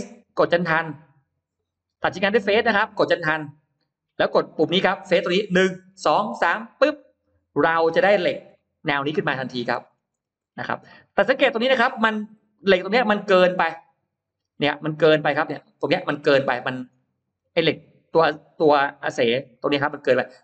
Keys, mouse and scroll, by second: 2.4 click, 3.6 click, 6.6 click, 7.7-8.5 scroll up 4, 8.5 middle click, 9.5-10.0 scroll down 2, 10.0-10.9 scroll up 1, 10.8-15.0 middle drag, 15.3 middle click, 16.7 scroll up 1, 17.4-17.8 scroll up 1, 18.2-18.6 scroll up 1, 19.4 middle click, 19.9 scroll up 2, 20.3 middle click.